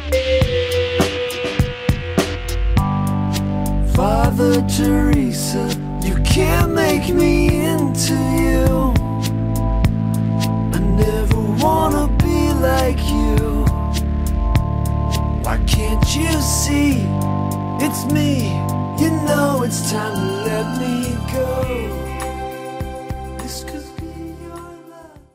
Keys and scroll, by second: 23.9-24.4 scroll, 24.9 scroll.